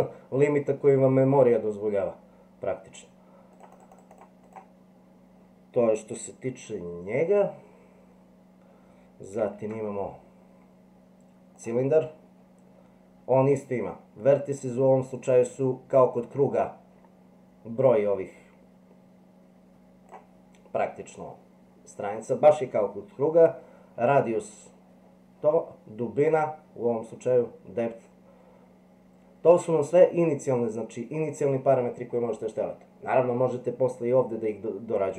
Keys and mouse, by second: 3.5 click, 3.7 click, 3.9 click, 4.2 click, 4.4 click, 7.1 Delete, 9.6 shift+a, 17.8-20.1 drag, 26.4-30.2 drag.